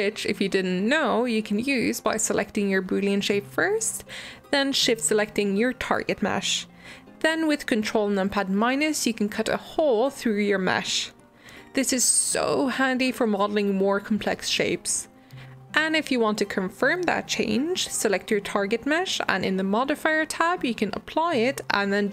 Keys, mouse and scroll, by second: 0.0-2.1 typing, 0.9 middle click, 1.6 middle click, 2.0 middle click, 2.8-3.8 middle drag, 3.8 g, 4.3 shift+click, 8.5 ctrl+KP_Subtract, 9.9 click, 10.9 click, 17.6 click, 20.6-22.1 drag.